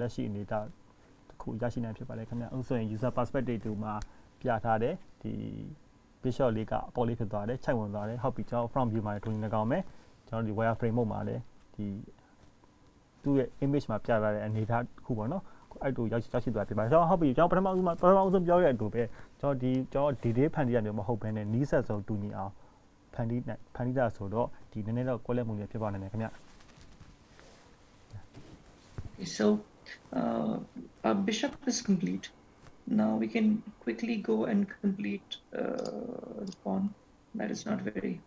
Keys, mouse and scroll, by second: 0.0-1.3 scroll down 6, 1.3-2.0 scroll up 5, 2.6-3.7 scroll down 1, 10.5-11.1 scroll down 8, 11.1-12.1 scroll down 3, 12.1-13.9 scroll up 1, 14.5 scroll up 1, 15.0 scroll up 2, 17.6 Tab, 17.9 ctrl+s, 20.5 ctrl+s, 30.1-30.8 scroll down 3, 30.8-33.6 scroll up 3, 33.6 scroll up 1, 34.4-36.0 scroll down 1, 36.0 click.